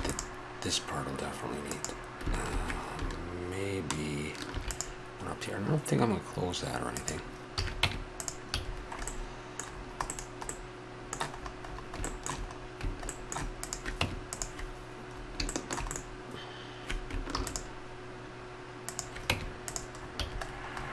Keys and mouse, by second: 4.5 ctrl+r, 7.5 a, 7.8 Tab, 8.6 a, 13.6 right click, 14.0 Tab, 17.3 ctrl+r, 19.3 Tab, 20.2 a.